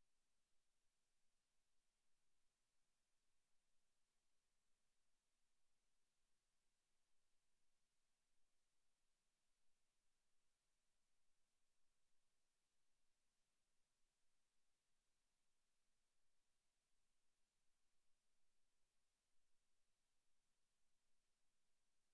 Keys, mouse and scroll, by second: 1.9 click, 3.3 middle click, 5.6 shift+middle click, 6.3 middle click, 6.7 middle click, 7.9 scroll down 5, 8.4 Tab, 8.9 Tab, 9.2 right click, 9.5 Tab, 10.9 click, 11.9 click, 12.1 click, 13.3 click, 13.9 click, 14.5 click, 15.3 click, 16.8 click, 19.1 click.